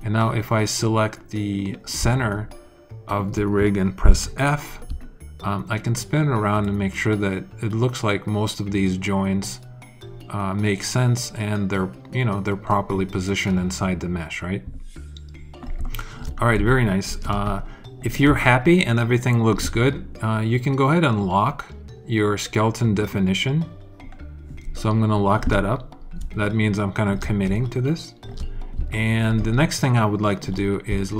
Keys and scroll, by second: 4.0 alt+f, 4.8 alt+f.